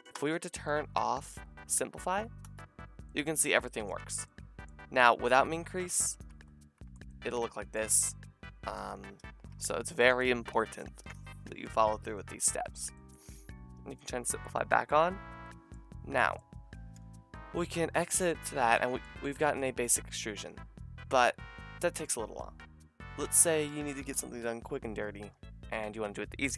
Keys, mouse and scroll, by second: 0.1 Tab, 2.4 click, 3.5 shift+middle click, 4.0 Tab, 4.4-5.6 middle drag, 5.6-7.5 drag, 6.3 Tab, 6.8 Tab, 9.7 ctrl+z, 9.9 ctrl+z, 11.5 Tab, 14.0-24.9 middle drag, 17.5 KP_Divide, 23.2 Tab, 25.1 a, 25.7 KP_Divide.